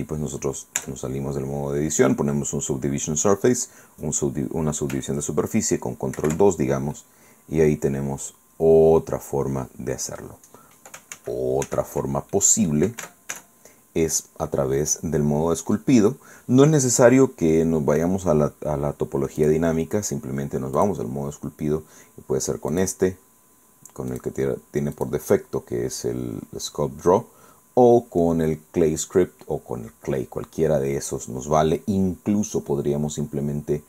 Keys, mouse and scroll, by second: 0.8 Tab, 6.2 ctrl+2, 7.0-9.6 drag, 9.6 scroll down 2, 11.2 ctrl+z, 12.4 ctrl+middle click, 13.0 Tab, 19.4 click, 20.8 click, 22.8 click, 24.2 click, 25.0 click.